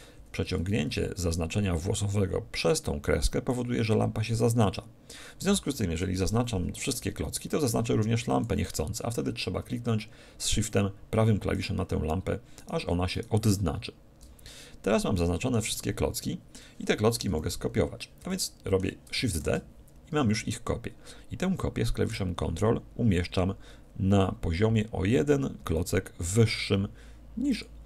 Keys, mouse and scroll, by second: 0.5 a, 0.9 b, 5.4 a, 6.1 KP_1, 7.0 b, 11.5-15.1 right drag, 14.3 middle click, 15.1-17.7 middle drag, 17.3 KP_1, 18.3-20.2 middle drag, 19.4 shift+d, 27.6-27.8 drag.